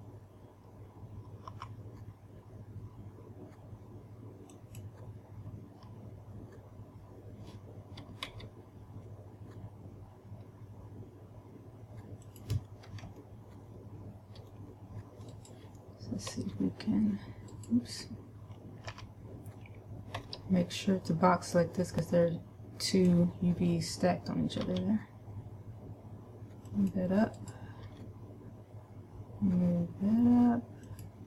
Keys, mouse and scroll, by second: 2.0 s, 5.7 click, 8.8 g, 12.8 click, 13.6 shift+middle click, 15.8 right click, 16.8 g, 18.1 right click, 19.4 a, 20.7 b, 25.1 g, 27.3 click, 27.8 right click, 28.3 g.